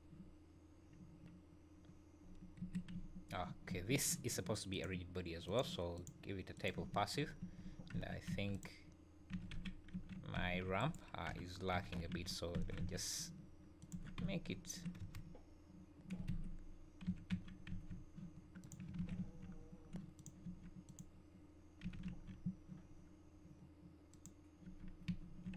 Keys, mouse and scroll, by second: 2.6 Escape, 2.9 `, 3.7 `, 4.7 click, 5.4 click, 6.9 `, 7.4 `, 7.7 scroll up 2, 7.9 Tab, 8.3 3, 8.5 click, 9.3 g, 11.3 o, 11.7 g, 13.9 Tab, 14.2 `, 15.0 space, 16.3 Escape, 17.0 g, 19.0 alt+a, 19.1 `, 19.5-19.9 scroll down 4, 20.1 click, 20.4 Tab, 20.8 click, 21.8 g, 24.6 Tab, 25.1 `.